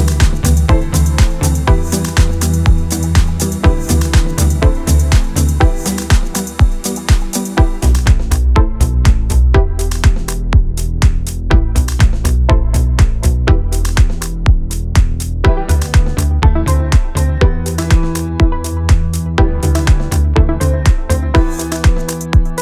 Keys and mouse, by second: 0.1 Delete, 0.4 middle click, 0.6-7.7 typing, 1.1 click, 1.4 shift+middle click, 2.2 click, 2.7 click, 3.2 click, 3.5 click, 4.2 shift+middle click, 4.5 click, 4.8 click, 5.2 click, 5.4 click, 5.9 right click, 6.0 shift+middle click, 6.4 click, 6.6 shift+middle click, 6.9 click, 7.8 right click, 7.9 shift+middle click, 9.0 middle click, 9.2 KP_3, 9.8 click, 10.8 g, 11.1 ctrl+z, 11.2 shift+middle click, 11.4 g, 11.7 ctrl+z, 12.1 middle click, 12.2 middle click, 12.5 KP_3, 13.2 e, 14.3 middle click, 14.5 middle click, 14.7 Delete, 14.8 middle click, 15.0-15.9 typing, 15.2 click, 15.7 click, 16.4 shift+middle click, 16.7 shift+middle click, 17.1 shift+middle click, 17.4 click, 17.8 shift+middle click, 17.9 shift+middle click, 18.1 e, 18.4 g, 18.6 middle click, 18.7 middle click, 18.8 x, 18.9 middle click, 19.0 KP_3, 20.2 middle click, 20.3-21.7 typing, 20.9 click, 21.1 shift+middle click, 21.5 click, 21.6 click, 22.3 click.